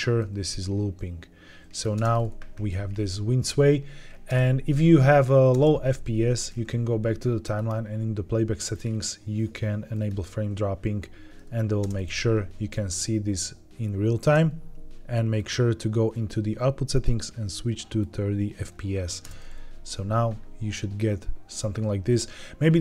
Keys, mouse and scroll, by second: 0.4-1.7 drag, 1.9 space, 4.2 space, 5.4 space, 6.2 ctrl+Tab, 7.3-10.7 drag, 11.1 ctrl+Tab, 11.7 space, 14.1 space, 15.3 click, 16.8-18.0 drag, 19.1 space.